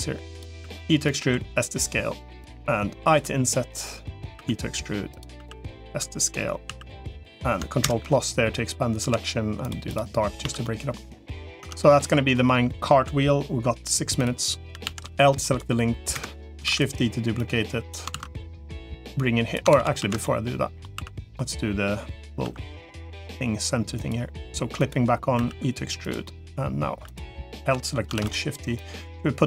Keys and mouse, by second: 0.4 e, 1.0 s, 3.0 i, 4.2 e, 5.2 s, 6.6 s, 7.8 ctrl+KP_Add, 7.8 ctrl+KP_6, 8.8 g, 10.4 Tab, 10.6 middle click, 11.4 Tab, 11.8 click, 12.2 middle click, 14.8 l, 15.4 right click, 16.6 shift+d, 17.4 click, 18.0 ctrl+z, 18.4-19.4 drag, 19.6 ctrl+z, 19.8 ctrl+z, 20.2 middle click, 20.8 3, 22.4 i, 24.6 click, 25.2 e, 26.2 middle click, 27.4 l, 28.0 shift+d, 28.6-29.4 drag.